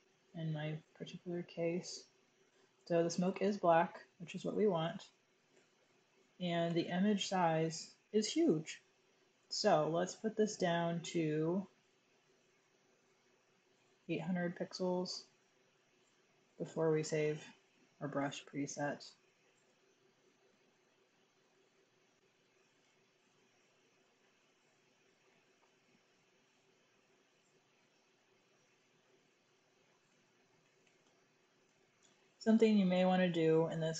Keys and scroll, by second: 5.4 super+i, 5.7 super+i, 6.6 alt+super+i, 12.8-13.7 typing, 16.5 super+0, 22.8 super+e, 30.1-31.4 typing, 31.5 Return.